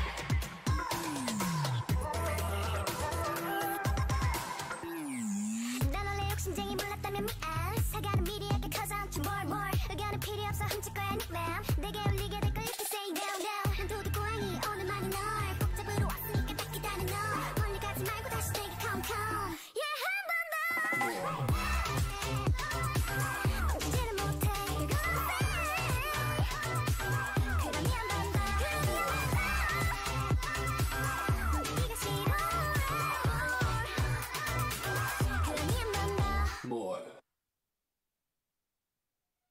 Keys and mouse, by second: 3.9 right click, 4.8 shift+right click, 5.0 shift+click, 5.2-6.7 shift+right drag, 5.7 shift+g, 8.2-10.4 right drag, 8.9 g, 12.3 g, 14.3 Tab, 15.3-17.1 drag, 16.0 z, 17.3 click, 19.1 z, 19.7 Tab, 20.0 a, 20.4 a, 20.5 w, 21.9 Tab, 24.0-26.9 drag, 24.6-26.1 middle drag, 25.4 right click, 26.1 Tab, 26.5 a, 26.8 a, 26.9 w, 29.9 ctrl+Tab, 31.5 x, 32.7 g, 34.7 middle click, 34.9 middle click, 35.1 a, 35.7 right click, 37.6 f, 38.9 f, 39.1-39.5 f.